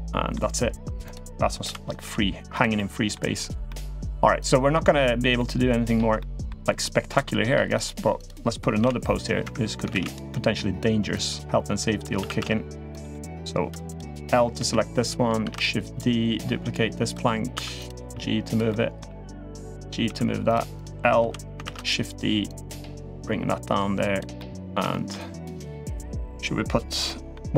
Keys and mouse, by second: 0.9 click, 1.4 l, 1.8 g, 2.5-2.9 middle drag, 3.4 middle drag, 4.2 click, 5.1-5.7 middle drag, 5.9-6.2 middle drag, 6.6-7.0 middle drag, 7.4 click, 8.0 click, 8.6 click, 9.7 shift+d, 10.1 middle drag, 10.9 click, 11.9 r, 12.9 middle drag, 13.7 click, 14.3 l, 15.2 shift+d, 15.7-16.9 drag, 17.3 2, 17.5 click, 17.8 g, 18.5 middle drag, 19.1 click, 19.5 click, 19.8 g, 20.5 click, 21.0 l, 21.4 shift+d, 22.3 click, 24.2 middle click, 24.7 shift+middle click, 25.3 click, 25.6 middle click, 26.8 middle click, 27.3 Tab.